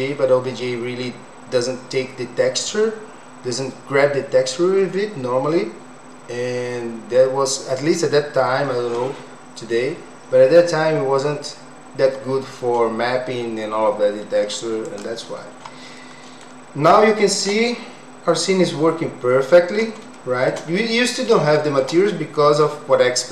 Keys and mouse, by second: 16.0 middle click, 17.2 shift+middle click, 18.7 middle click, 20.2 shift+middle click, 20.8 middle click, 21.5 shift+middle click, 22.1 middle click.